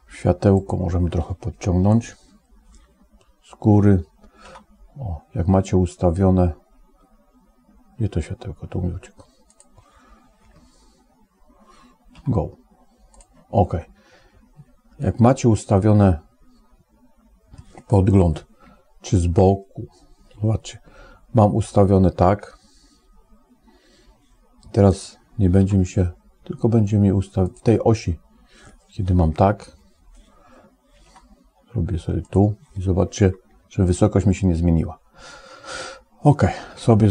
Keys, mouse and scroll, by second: 0.3 click, 2.7 KP_7, 4.3 g, 10.4 ctrl+z, 12.0 g, 15.3-17.5 middle drag, 18.5 KP_1, 27.2 g, 29.1 KP_7, 30.9 g, 33.0 KP_1, 36.2 click.